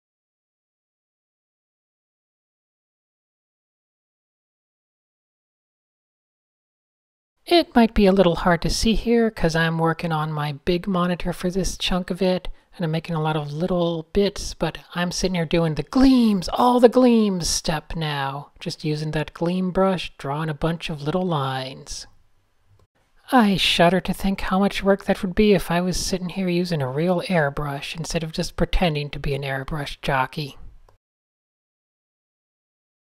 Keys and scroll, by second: 1.0-3.0 typing, 4.0 super+s, 4.8 super+z, 5.8 super+z, 7.2 n, 7.7 super+z, 8.3 super+z, 8.4 super+space, 10.5 super+0, 12.6 super+z, 15.7 super+z, 15.8 Tab, 16.5 super+z, 18.2 super+z, 21.4 super+z, 22.9 super+z, 23.2 super+z, 23.4 super+z, 23.6 super+n, 24.0-24.9 typing, 25.8 super+z, 26.7 super+z, 28.2 super+z, 28.9 super+z, 29.8 super+z.